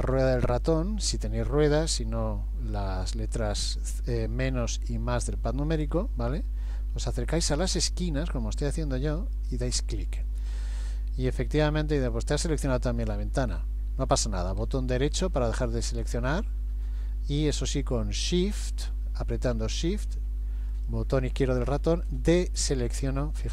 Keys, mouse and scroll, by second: 15.4 middle click, 20.7 shift+click, 22.0 middle click.